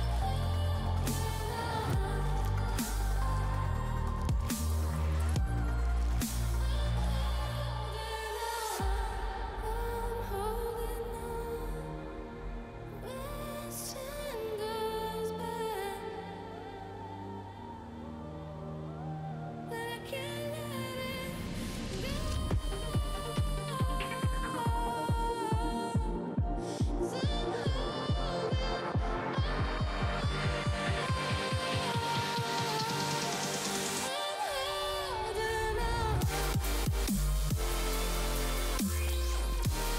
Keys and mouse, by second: 0.6 click, 1.1 click, 2.0 click, 3.3 click, 4.4 click, 5.2 click, 5.8 space, 5.8 click, 6.7 click, 7.4 space, 7.5 click, 9.3 click, 10.2 space, 10.3 click, 11.3 click, 12.4 space, 12.8 click, 13.3 space, 13.3 click, 14.2 click, 15.5 click, 16.6 click, 17.6 Return, 18.8 click, 20.0 click, 21.2 click, 21.8 space, 21.8 click, 23.4 click, 26.1 space, 26.2 click, 27.5 click, 27.9 ctrl+z, 28.0 click, 28.4 click, 28.5 click, 29.3 click, 29.5 click, 30.5 click, 30.7 click, 31.3 x, 31.4 click, 31.8 ctrl+z, 32.5 click, 32.8 x, 33.0 click, 33.5 click, 34.5 click, 34.9 click, 35.2 click, 35.4 click, 35.7 click, 35.8 click, 38.7 click.